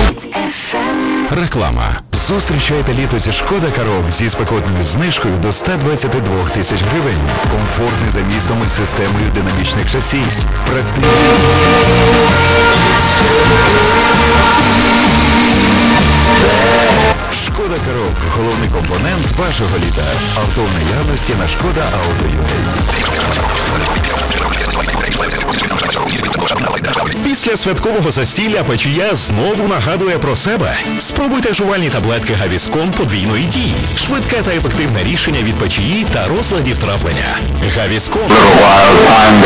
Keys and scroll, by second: 0.1 Page_Down, 17.1 Page_Down.